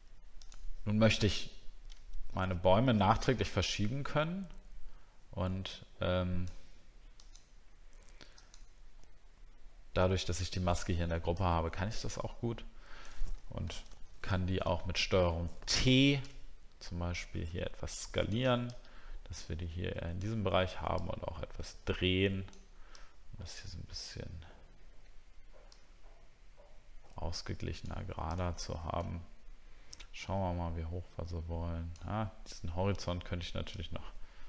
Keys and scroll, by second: 13.9 ctrl+t.